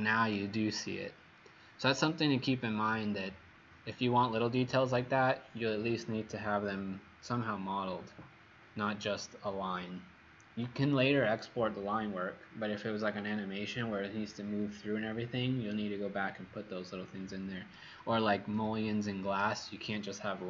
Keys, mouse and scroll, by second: 18.5 ctrl+z.